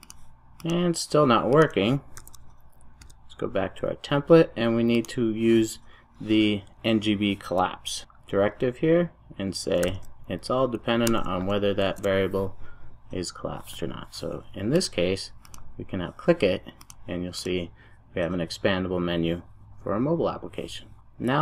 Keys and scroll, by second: 1.8 super+s, 2.3 super+e, 7.9 Return, 12.1 super+s.